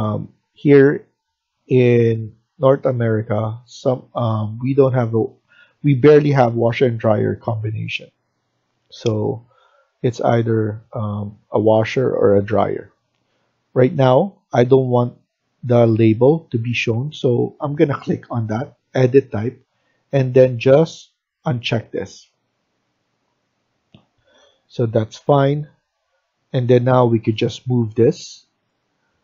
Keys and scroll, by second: 24.0 Escape, 24.2 Escape.